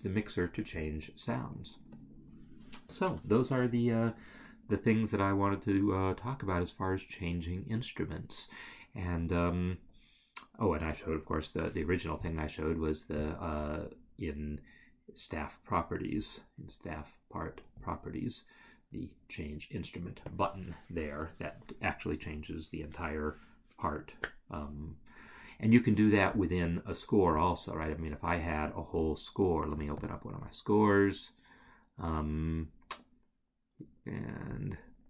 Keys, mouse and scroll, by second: 0.8 scroll, 16.3 right click, 31.5 ctrl+o, 34.6 click.